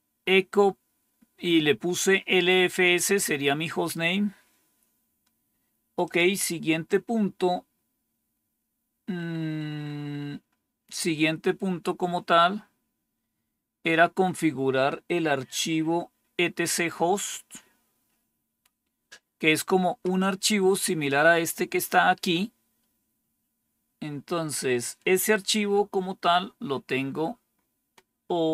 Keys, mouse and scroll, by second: 5.9 click, 7.0-7.6 scroll down 1, 8.5-9.5 scroll down 1, 9.5-10.3 scroll down 1, 10.3-11.5 scroll down 1, 12.4-13.4 scroll down 1, 13.4-17.3 scroll down 1, 17.3-18.7 scroll down 1, 18.7-19.6 scroll down 1, 19.6-23.1 scroll down 1, 23.1-28.4 scroll down 1, 28.4-28.5 scroll down 1.